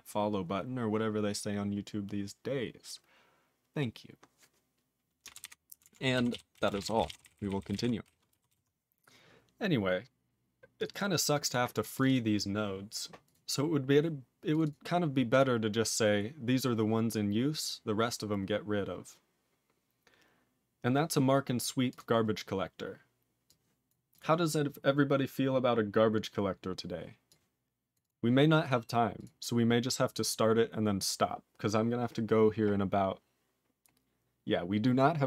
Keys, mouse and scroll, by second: 5.4 ctrl+alt+b, 5.8 ctrl+alt+f, 6.3 ctrl+s, 6.5 ctrl+a, 6.7 ctrl+space, 6.7 ctrl+e, 6.8 ctrl+n, 7.0 ctrl+e, 7.1 ctrl+n, 7.2 ctrl+n, 7.3 ctrl+n, 7.5 ctrl+n, 7.6 ctrl+n, 7.7 ctrl+g, 7.7 ctrl+e, 8.5 ctrl+s, 10.8 click, 10.8 click, 10.9 double click, 10.9 double click, 11.4 click, 11.4 double click, 11.5 double click, 11.9 click, 12.0 click, 12.0 double click, 12.1 double click, 13.2 click, 13.3 click, 13.8 click, 14.5 click, 14.5 click, 14.6 double click, 14.7 double click, 15.3 click, 15.3 click, 15.9-17.0 scroll up 1, 21.9 click, 21.9 click, 22.3 scroll up 3, 23.4 click, 23.9 click, 24.1 click, 24.2 click, 27.3 click, 27.9 click, 28.0 click, 28.0 click, 28.7 click, 28.7 click, 29.1 click, 29.2 click, 30.0-32.2 scroll up 3.